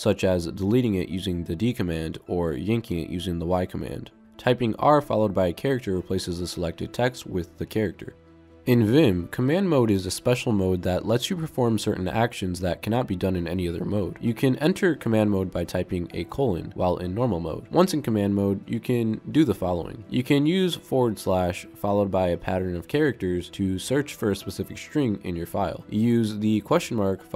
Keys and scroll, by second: 1.8 d, 3.9 y, 5.4 r, 16.7 shift+;, 21.6 /.